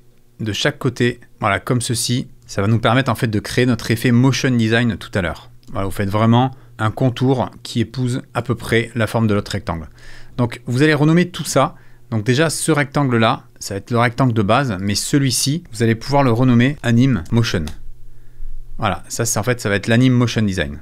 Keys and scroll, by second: 16.1 F2, 16.5-17.8 typing, 18.6 Return.